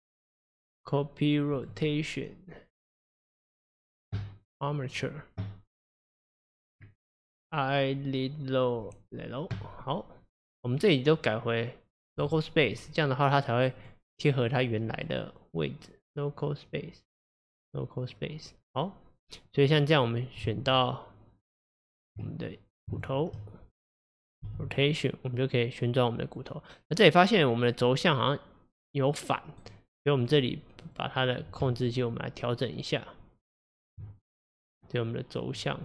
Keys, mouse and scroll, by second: 0.3-3.3 drag, 3.5 click, 6.1-9.1 drag, 10.7-13.9 drag, 15.0-18.7 drag, 18.7 scroll down 1, 19.2-19.7 scroll up 2, 19.7 click, 20.5 Tab, 23.0 shift+click, 24.5 r, 30.3 click, 30.9 click, 31.7 Tab, 34.3 click, 35.5 click.